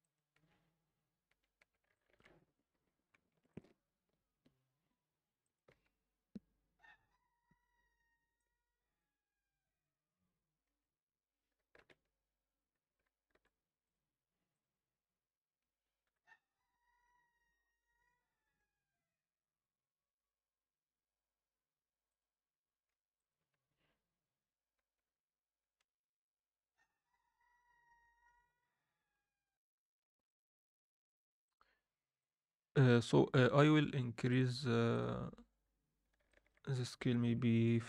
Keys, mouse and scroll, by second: 0.0 click, 0.4 Tab, 1.4 Tab, 1.7 Tab, 1.9 alt+shift+middle click, 2.3 scroll up 1, 3.1 ctrl+r, 5.2 middle click, 5.7 Tab, 7.1 Tab, 8.4 alt+middle click, 10.7 a, 11.8 shift+n, 13.3 u, 16.0 KP_7, 16.6 Tab, 17.7 scroll down 2, 19.3 alt+a, 22.2 click, 22.8-23.2 scroll up 2, 23.1 click, 23.5 Tab, 24.7 Tab, 25.0 scroll down 2, 29.4 F9, 30.2 click, 31.4-32.2 drag, 35.0-36.1 drag, 36.2-37.8 shift+drag.